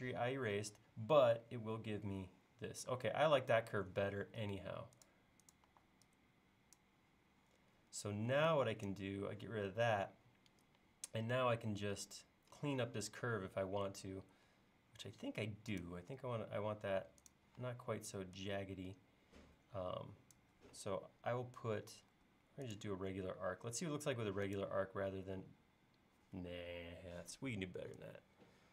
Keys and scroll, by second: 4.1 l, 5.7 e, 14.3 l, 17.6 e, 22.2 a, 26.8 Escape.